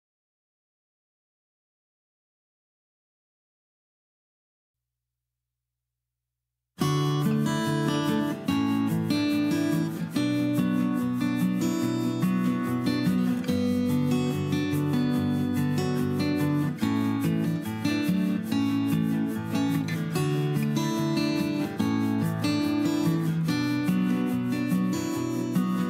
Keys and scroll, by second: 2.4 q, 3.5-4.9 typing, 12.3 Escape, 13.7 e, 14.2 Escape, 15.4 Escape, 15.6 r, 17.9-19.3 typing, 19.9 ctrl+g, 22.5 Escape, 23.0 ctrl+h, 23.9 p, 24.8 Escape, 25.4 h.